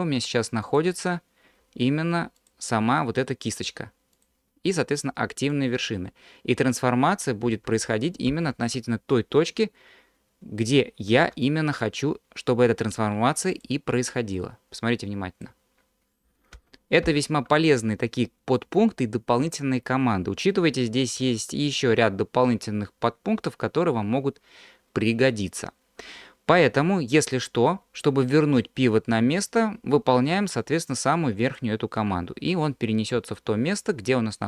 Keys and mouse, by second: 0.1 q, 1.6 q, 3.7 q, 5.5-7.3 drag, 7.7 ctrl+z, 8.4 ctrl+z, 11.3 q, 14.4-15.5 drag, 16.6 ctrl+z, 17.1 ctrl+z, 21.2 q, 33.7-34.4 drag.